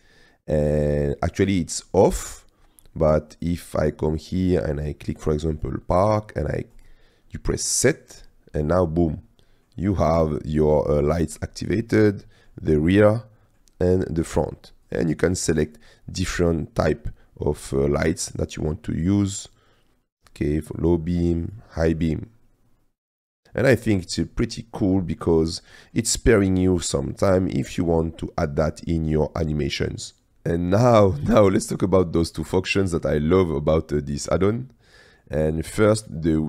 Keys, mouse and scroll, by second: 3.5-5.7 drag, 6.8 drag, 8.3-9.4 middle drag, 9.4 drag, 10.7-11.0 drag, 11.8-12.5 drag, 13.0-13.5 drag, 14.8-15.9 drag, 16.3 click, 18.0-18.6 middle drag, 18.6-20.3 drag, 20.9-21.7 drag, 21.9 click, 23.2 middle drag, 24.3-25.2 middle drag, 25.2-25.7 drag, 25.7 middle click, 26.5-27.9 middle drag, 33.2-35.3 drag.